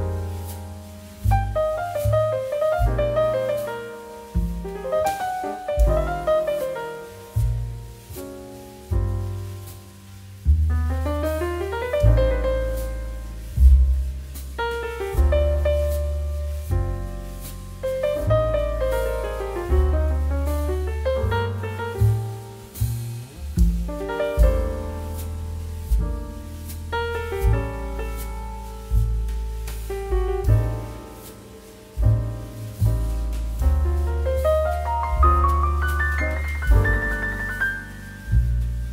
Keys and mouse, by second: 8.3 click, 11.5 click, 12.3 shift+click, 12.7 middle click, 15.7 click, 15.9 middle click, 16.1 shift+middle click, 16.5 shift+middle click, 18.9 right click, 21.3 click, 23.2 middle click, 25.9 middle click, 27.1 ctrl+shift+middle click, 28.0 middle click, 28.2 shift+middle click, 28.4 click, 29.1 shift+a, 33.2 click, 33.9 g, 34.6 shift+z, 35.4 click, 35.7 g, 36.2 click, 36.7 middle click, 37.1 g, 37.4 shift+z, 38.3 click, 38.5 middle click, 38.8 middle click.